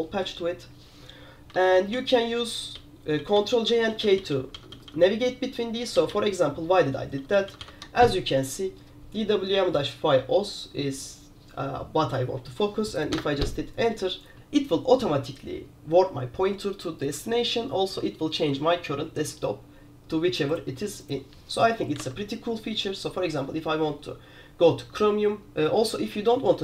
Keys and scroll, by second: 1.9 ctrl+j, 2.1 ctrl+j, 2.2 ctrl+j, 2.6 ctrl+k, 2.8 ctrl+k, 3.0 ctrl+k, 3.3 ctrl+j, 3.5 ctrl+j, 3.6 ctrl+j, 3.8 ctrl+j, 4.0 ctrl+k, 4.1 ctrl+k, 4.3 ctrl+k, 4.4 ctrl+k, 4.6 ctrl+j, 4.8 ctrl+j, 5.0 ctrl+j, 5.1 ctrl+j, 5.9 ctrl+k, 6.0 ctrl+k, 6.3 ctrl+k, 7.2 ctrl+j, 7.4 ctrl+j, 7.6 ctrl+j, 7.7 ctrl+j, 13.2 Return, 22.1 alt+Tab.